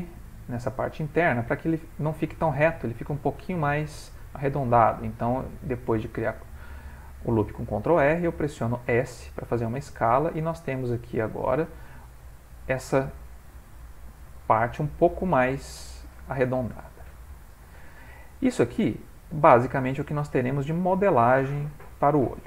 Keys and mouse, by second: 0.6 middle click, 1.3 middle click, 1.9 middle click, 4.5 s, 6.4 middle click, 6.5 middle click, 8.4 middle click, 9.6 middle click, 10.2 Tab, 10.6 middle click, 11.5 Tab, 11.8 middle click, 16.6 middle click, 17.3 ctrl+middle click, 17.6 middle click.